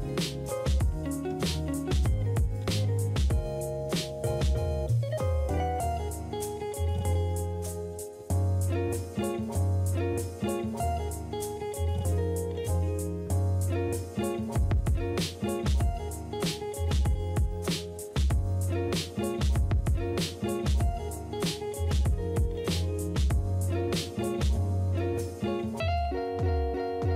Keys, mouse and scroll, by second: 2.8 ctrl+click, 5.1 space, 6.2 space, 10.2 s, 18.9 s, 22.7 typing.